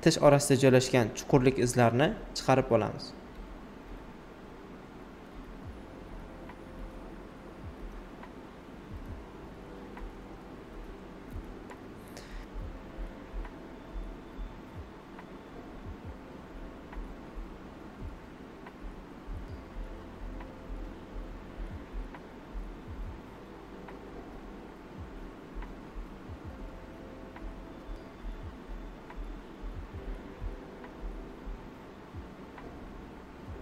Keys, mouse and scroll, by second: 0.8 alt+right click, 2.6 click, 4.3 shift+click, 5.0 alt+right click, 6.2 alt+right click, 6.8 alt+shift+right click, 8.1 click, 11.6 shift+click, 12.4 alt+shift+right click, 13.2-15.4 drag, 16.4 shift+click, 17.4 right click, 17.7 alt+right click, 18.5 click, 20.4 shift+click, 21.4 right click, 22.4 click, 25.2 shift+click, 26.2 alt+shift+right click, 26.2 typing, 28.6 right click, 31.9 click.